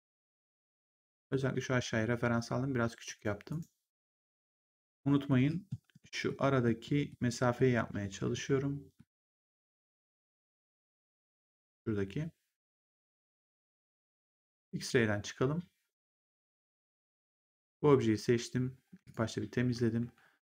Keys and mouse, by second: 3.0 right click, 4.1 click, 5.0 middle click, 12.6 click, 16.1 click, 18.9 click, 19.9 r.